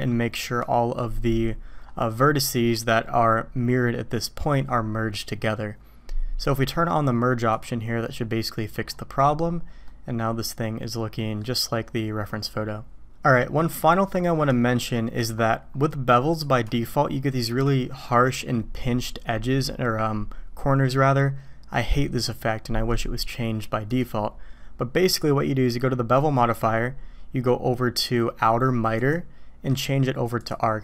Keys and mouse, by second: 7.5-8.8 drag, 9.8-10.2 drag, 10.2-11.4 middle drag, 13.7 click, 14.9 click, 16.3 click, 16.7-17.5 shift+drag, 23.9 click, 25.1 click, 29.0-30.5 drag.